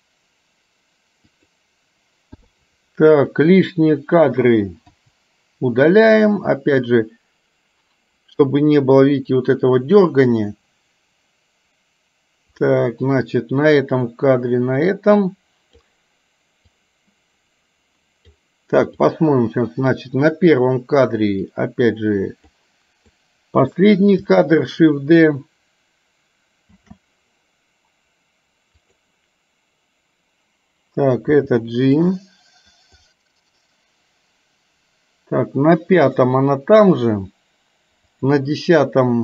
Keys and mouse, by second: 2.5 i, 3.3 click, 5.0 Delete, 6.3-16.0 drag, 16.7-18.5 drag, 19.2-20.2 drag, 21.6-22.6 drag, 23.2 click, 26.7 shift+d, 31.5 g, 33.2-36.3 drag, 38.2 click.